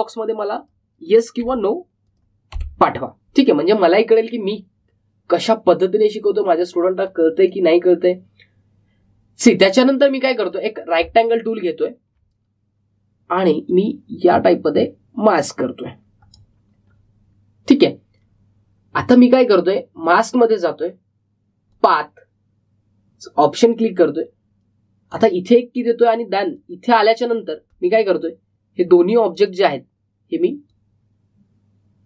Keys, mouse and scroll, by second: 1.5 click, 8.0-12.3 drag, 12.3-12.7 alt+scroll up 1, 13.1 alt+scroll down 1, 14.9-21.0 drag, 26.0-32.0 drag.